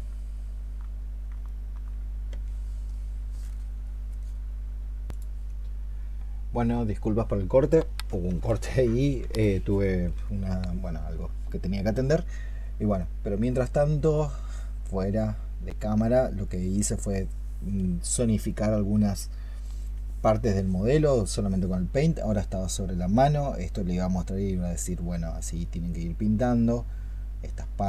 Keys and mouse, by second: 1.3 alt+click.